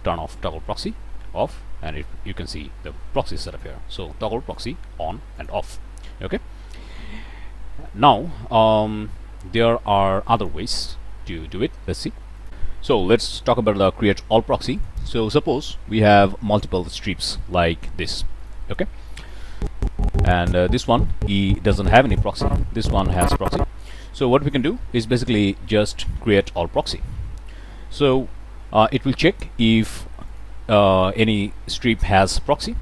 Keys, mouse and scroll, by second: 1.4-3.8 drag, 4.5 click, 5.3 click, 10.4 click, 12.4 click, 14.8 click, 16.6-17.8 drag, 18.4 click, 19.5-24.0 drag, 24.2 click, 24.6-25.0 middle drag, 26.8 click, 30.2 click.